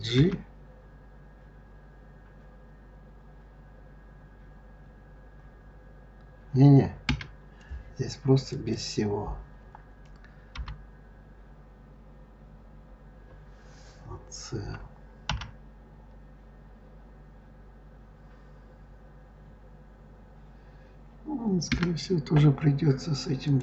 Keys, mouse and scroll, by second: 0.0 g, 8.3 click, 10.4 g, 23.3 click.